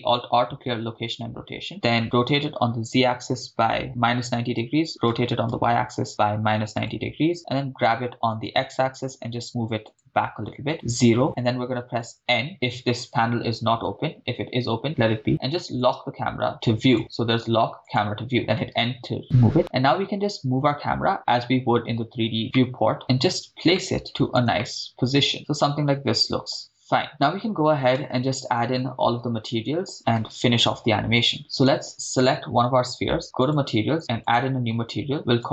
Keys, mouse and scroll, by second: 1.7 alt+r, 4.0-6.4 typing, 4.9 Return, 6.8 Return, 7.6 g, 8.5 x, 9.9 ctrl+click, 16.3 click, 16.9 drag, 18.3 click, 18.4 n, 20.9-22.4 scroll down 2, 21.1-22.4 scroll up 1, 22.6 shift+middle click, 23.8 shift+middle click, 24.6 shift+middle click, 25.3 shift+space, 27.2 shift+space, 28.0 shift+space, 30.2 shift+space, 31.6 click, 31.6 right click, 33.4 click, 34.3-35.5 drag.